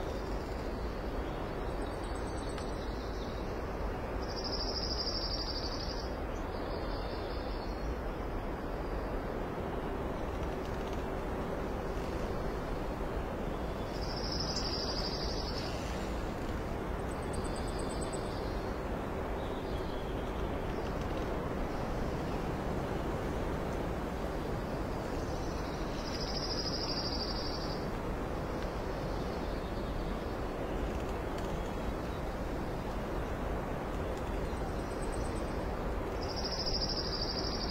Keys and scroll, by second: 0.1 alt+space, 1.3 space, 4.8 alt+space, 6.6 ctrl+s, 9.4 space, 17.1 ctrl+s, 17.8 space, 18.3 alt+space, 21.9 alt+space, 24.5 ctrl+i, 25.1 space, 25.7 Down, 26.0 ctrl+z, 26.4 ctrl+z, 27.2 Down, 27.3 Down, 27.5 Down, 28.0 Right, 28.1 Right, 28.2 Right, 28.5 Left, 28.5 Left, 28.8 Left, 29.0 Left, 29.3 Up, 29.9 Down, 30.1 space, 32.5 shift+Down, 33.2 Up, 33.4 Up, 33.5 Up, 35.7 ctrl+s.